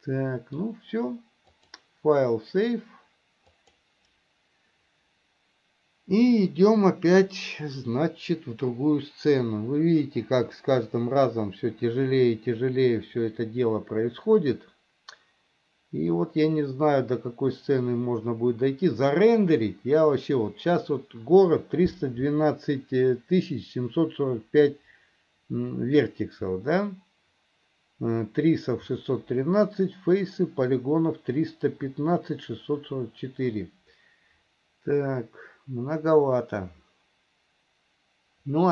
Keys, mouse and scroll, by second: 1.7-7.8 drag.